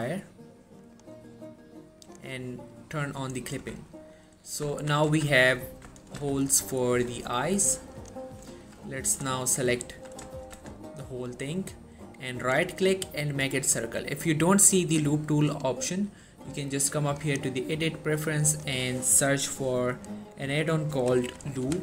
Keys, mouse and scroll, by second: 3.3-3.7 scroll up 1, 3.7 Tab, 4.2 middle click, 4.9 1, 5.2 z, 5.6-6.3 scroll up 1, 6.3 z, 8.1 click, 9.2 click, 10.5 shift+middle click, 10.6 z, 12.5 right click, 16.5 click, 21.0-21.7 typing.